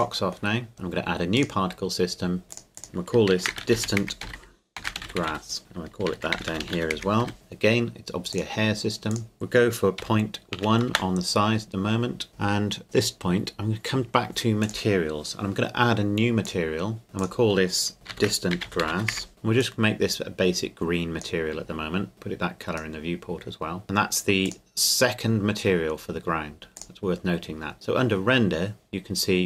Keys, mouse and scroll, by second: 3.3-7.2 typing, 5.6 click, 7.3 Return, 8.3 click, 10.0 KP_Decimal, 10.5 KP_1, 10.9 KP_Enter, 12.3-12.8 scroll up 1, 14.6 click, 18.1-19.1 typing, 19.3 click, 26.8 click.